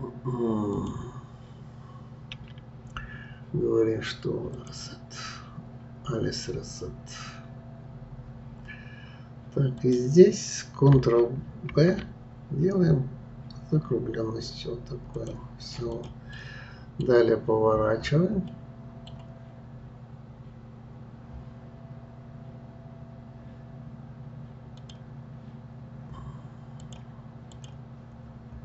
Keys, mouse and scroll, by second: 0.7 click, 2.3 a, 4.5 click, 9.8 click, 11.7 ctrl+b, 15.9 click, 16.3 middle click, 17.1-18.0 scroll down 10, 18.5-21.5 middle drag, 24.8 click, 26.8-28.2 drag, 28.2-28.5 scroll down 1.